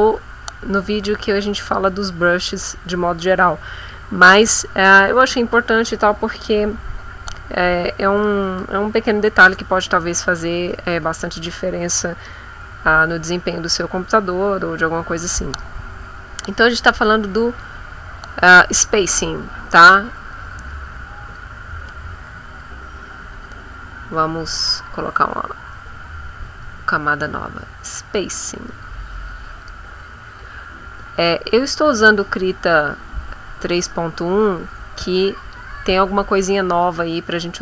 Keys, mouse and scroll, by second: 20.2-21.5 drag, 22.5 ctrl+z, 24.4 click, 26.4-29.7 drag, 31.3 click, 32.6 click, 33.2-34.5 drag, 35.4 click.